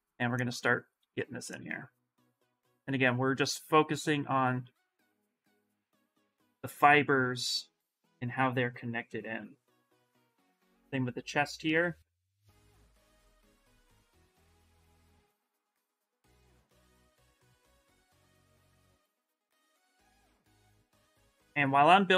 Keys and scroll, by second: 0.8 s, 2.8 s, 9.1 s, 18.1 s, 19.3 ctrl+z, 19.5 s.